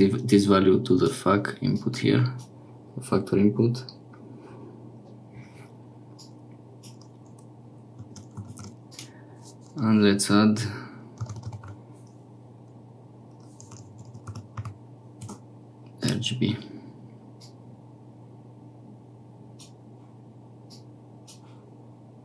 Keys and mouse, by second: 1.6-22.2 drag.